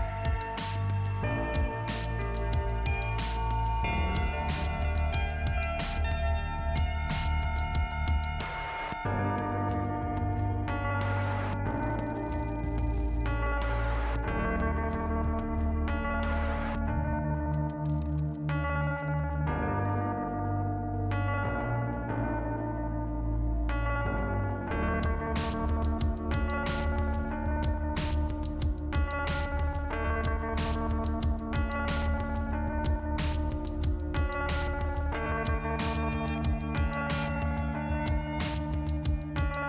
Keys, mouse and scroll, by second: 0.3 click, 1.7 click, 4.5 click, 5.9 click, 7.3 click, 8.2 click, 10.4 p, 10.8 scroll down 2, 16.8 click, 20.9-21.6 scroll up 1, 23.2 alt+k, 23.9 middle click, 24.3-25.3 scroll down 1, 26.6 shift+Return, 27.7 click, 28.8 click, 30.1 click, 36.2 click, 37.8 click, 37.8 click, 38.8 p, 39.3 scroll down 2.